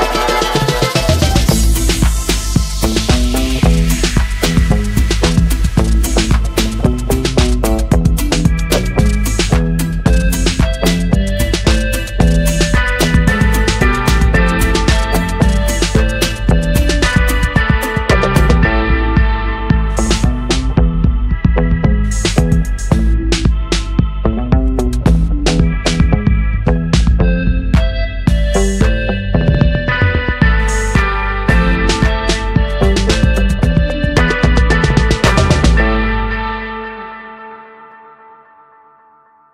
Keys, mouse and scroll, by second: 0.1-0.4 scroll up 1, 0.8-1.2 scroll up 1, 4.3 j, 5.2-6.4 drag, 8.5 space, 8.7 click, 9.0-9.6 space, 9.6 space, 10.4 click, 11.2 space, 11.4 click, 11.7-13.0 space, 15.4-16.4 space, 16.1 space, 17.1-17.7 space, 18.1-19.3 ctrl+drag, 19.8-20.4 ctrl+drag, 22.7 ctrl+l, 24.8-26.2 drag, 34.4 click, 34.6 space, 35.1 ctrl+click, 36.3 alt+space, 36.6 alt+click, 36.8 alt+space, 37.6 alt+space, 38.2 alt+scroll up 1.